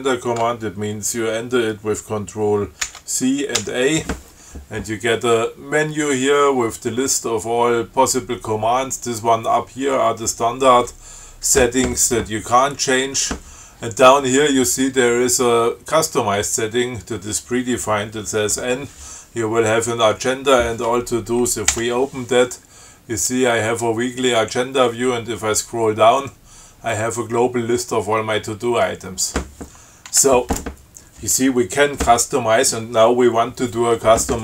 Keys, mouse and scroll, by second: 3.1 ctrl+c, 21.9 n, 24.2 scroll down 2, 24.8 scroll down 2, 25.4 scroll down 2, 29.4 scroll up 2, 30.3 q.